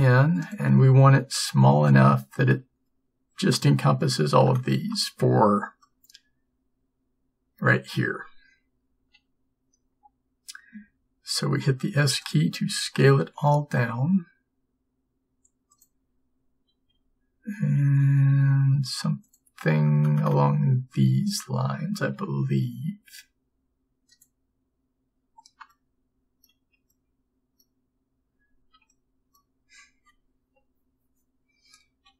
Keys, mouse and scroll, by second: 9.1 s, 13.2 g, 13.3 click, 17.1 s, 22.2 g.